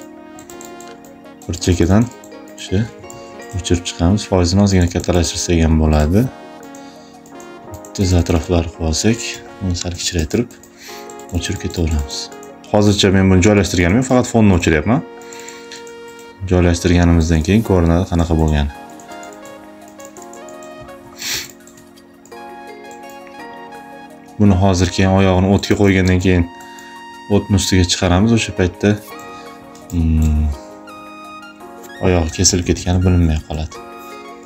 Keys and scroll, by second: 2.9 ctrl+alt+z, 9.1 [, 9.8 space, 21.1 space, 25.4 space, 29.6 space, 32.0 [.